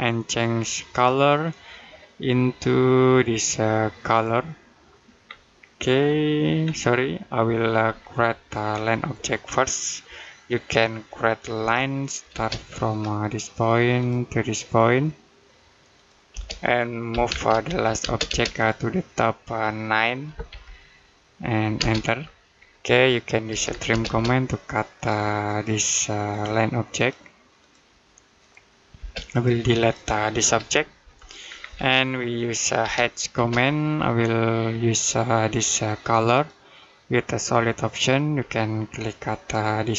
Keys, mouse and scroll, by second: 0.7 click, 3.9 click, 5.1-6.2 scroll down 1, 7.3 Escape, 7.9 middle click, 8.5 scroll up 1, 11.4 l, 12.2 space, 12.5-13.8 scroll up 1, 13.8 click, 16.1-17.9 typing, 18.4 click, 20.3 9, 21.6 space, 22.5 middle click, 23.4 t, 23.7 space, 24.8 click, 28.8 space, 29.1 click, 30.8 Delete, 31.3-31.8 scroll down 1, 31.8 middle click, 32.6 h, 33.2 space, 34.8 click, 39.3 click.